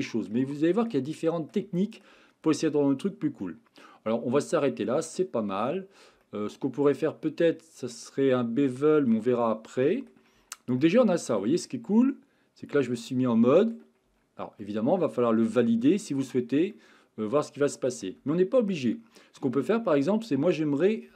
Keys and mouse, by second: 0.6 shift+middle click, 1.1 middle click, 1.8 shift+middle click, 3.4 middle click, 4.4-5.7 middle drag, 6.2-9.1 shift+middle drag, 9.4 middle click, 10.3 Tab, 10.8-13.7 middle drag, 14.1 Tab, 14.6-16.1 middle drag, 16.7-18.0 middle drag, 18.2 Tab, 20.0-20.5 middle drag.